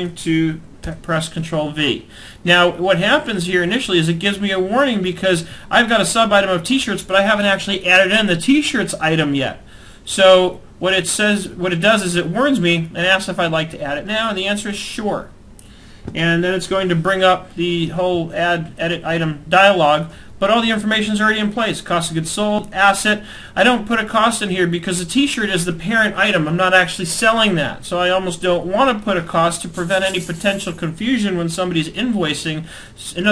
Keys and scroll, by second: 0.3 ctrl+v.